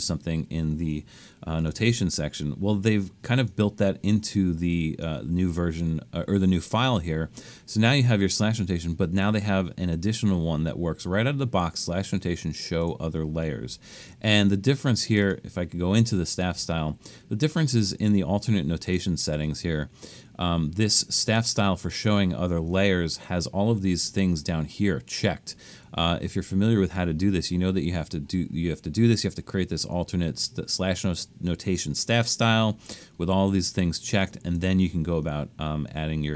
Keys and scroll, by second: 1.6 BackSpace.